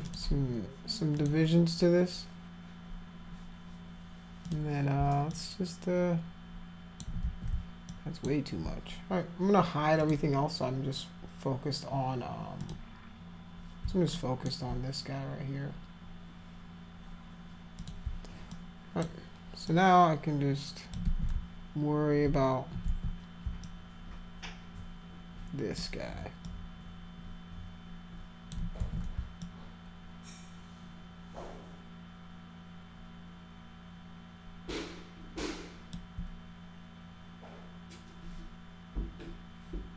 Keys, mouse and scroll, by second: 0.0 click, 1.2 click, 4.5 click, 5.3-7.0 alt+drag, 7.3 ctrl+z, 7.9 alt+click, 10.0 click, 12.6 click, 14.2 alt+middle click, 17.8 click, 18.5 alt+click, 19.7-20.9 alt+drag, 21.0 ctrl+z, 22.9 ctrl+z, 23.6-25.8 alt+drag, 26.5-28.5 alt+drag, 28.8 ctrl+z, 29.4-35.9 alt+drag.